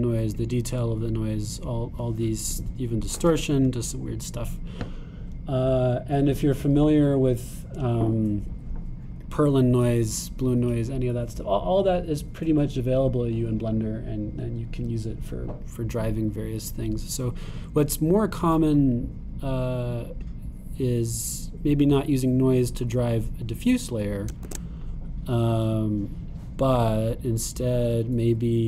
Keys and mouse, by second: 23.7 click, 25.5 shift+a, 26.6-28.5 drag.